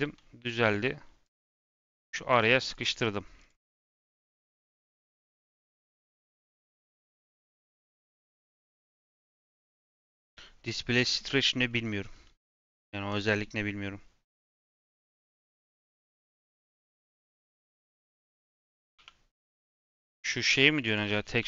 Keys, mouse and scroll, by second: 12.4-13.0 middle drag, 13.0 click, 14.3 a, 15.4 click, 16.5 click, 17.0 a, 17.5 click, 18.4 click, 18.9 3, 19.7 l, 20.4 g, 21.3 n.